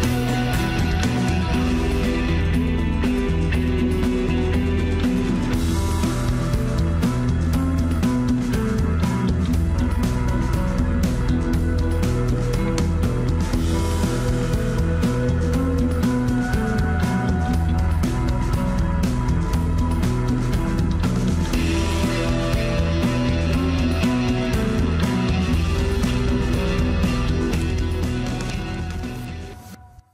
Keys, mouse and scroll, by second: 1.9 scroll down 1, 2.1 middle click, 2.8 scroll up 1, 3.1-4.2 middle drag, 4.2 ctrl+r, 5.6 ctrl+b, 7.6-8.7 middle drag, 8.7-10.2 drag, 10.5-11.0 scroll up 1, 11.0-12.4 middle drag, 12.4 ctrl+r, 17.3-17.6 scroll down 1, 17.6-18.9 middle drag, 18.9 Tab, 19.1 scroll down 1, 19.4-20.9 middle drag, 21.0 click, 21.3-21.6 scroll down 1, 21.6-22.1 shift+middle drag, 22.1-22.9 right drag, 22.9 scroll up 1, 23.1-24.2 shift+middle drag, 24.2 click, 25.1 click.